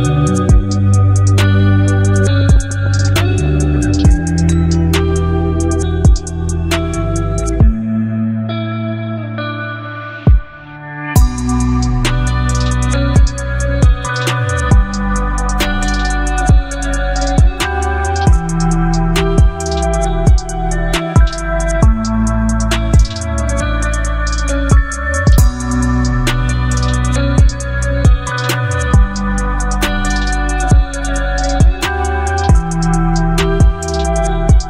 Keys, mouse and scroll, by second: 1.9 v, 2.1 ctrl+t, 4.1-5.6 alt+drag, 10.0 click, 13.1 right click, 14.5 click, 15.6 right click, 16.6 click, 18.0 right click, 19.4 click, 20.4 right click, 22.2 click, 28.0-32.3 drag.